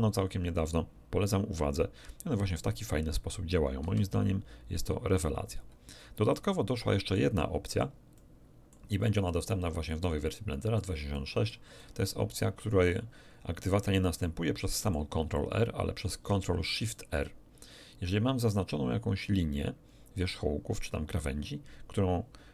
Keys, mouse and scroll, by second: 3.8 c, 5.1 click, 6.3 middle click, 6.6 click, 7.7 click, 7.9 middle click, 8.1 click, 9.0 middle click, 9.1 click, 9.8 middle click, 10.5 click, 11.1 middle click, 11.1 click, 11.3 middle click, 12.1-14.3 middle drag, 14.5 middle click.